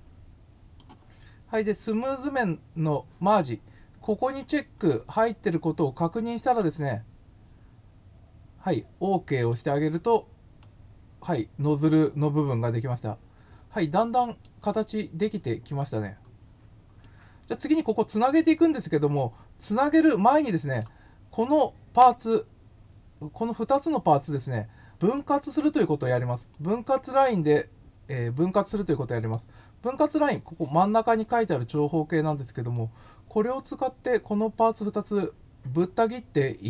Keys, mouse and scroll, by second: 5.2-6.5 drag, 9.3 click, 10.5-14.4 middle drag, 16.9 middle click, 18.2-20.7 middle drag, 25.1 middle click, 26.5-29.3 middle drag, 32.7-34.0 middle drag.